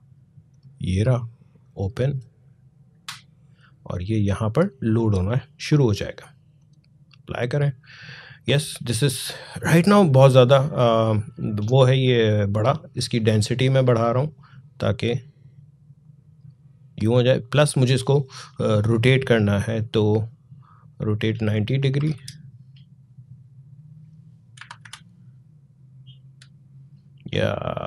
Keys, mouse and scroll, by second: 10.1-10.8 scroll down 1, 13.4-18.8 drag, 20.7-23.7 drag, 24.3 typing.